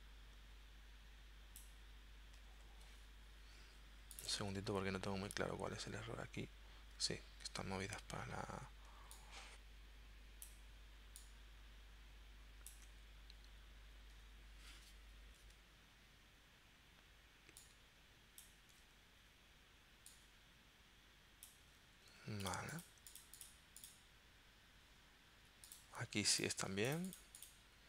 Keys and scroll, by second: 22.0 z.